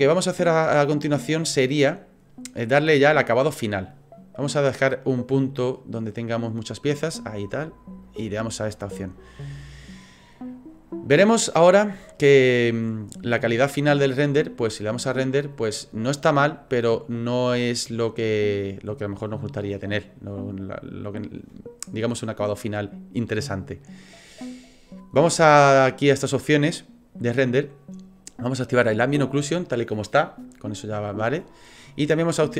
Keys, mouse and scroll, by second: 0.7 click, 8.0 click, 15.1 click, 27.3 click, 29.1 click.